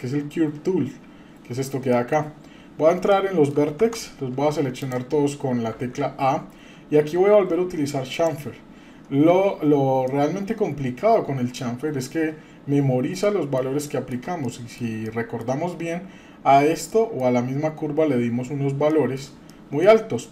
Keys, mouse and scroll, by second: 1.9 middle click, 2.3 scroll up 2, 3.1-3.5 shift+middle drag, 3.8 Tab, 4.8 click, 5.7 a, 8.1 click, 8.9-10.1 scroll down 4, 10.1-11.6 middle drag, 10.1-10.6 scroll down 1, 11.8 scroll up 1, 13.2 middle click, 13.9 shift+middle click, 14.4 middle click, 15.1 shift+middle click, 16.9 middle click, 18.9 middle click, 19.5 shift+middle click, 20.1-20.3 scroll up 2.